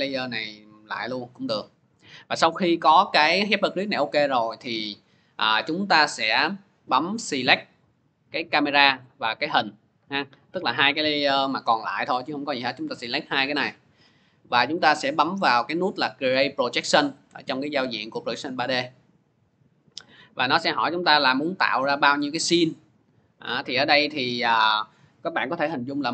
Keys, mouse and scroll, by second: 7.8 click, 9.3 ctrl+click, 18.7 click, 20.8 click.